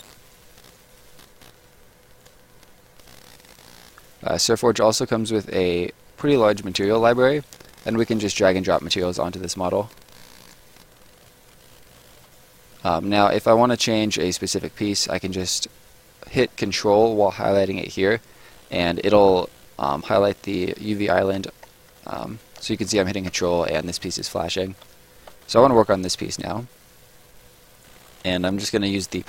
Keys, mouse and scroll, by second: 2.2 click, 3.0 right click, 4.9 click, 8.5 right click, 9.8 click, 10.7 right click, 12.6 middle click, 13.1 right click, 27.7 click.